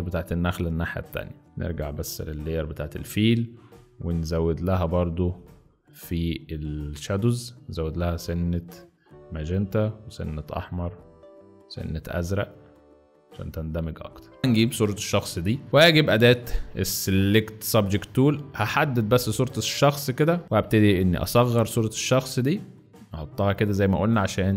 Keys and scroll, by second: 0.0 alt+z, 1.4 z, 20.4 v, 21.3 ctrl+t.